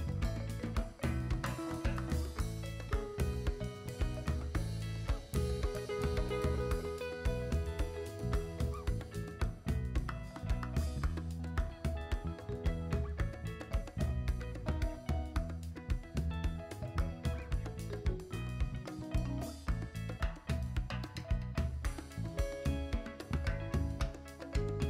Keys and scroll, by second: 3.6 s, 16.6 s, 22.1 s.